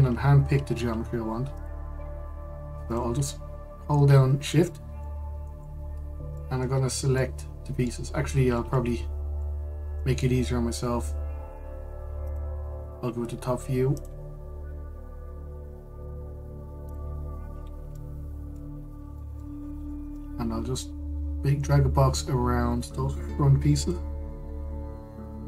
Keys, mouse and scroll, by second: 0.0 middle click, 0.3 Tab, 2.2-3.6 drag, 5.3 shift+click, 5.7-7.4 middle drag, 7.4-7.8 scroll up 2, 7.8-8.9 middle drag, 8.9-9.2 scroll down 2, 9.2-12.9 middle drag, 12.9-14.7 drag, 17.6 click, 18.2-18.6 scroll up 1, 18.6 shift+middle click, 19.5-19.8 scroll up 1, 19.8 shift+middle click, 20.2-20.6 scroll up 1, 20.6 shift+middle click, 21.4 click.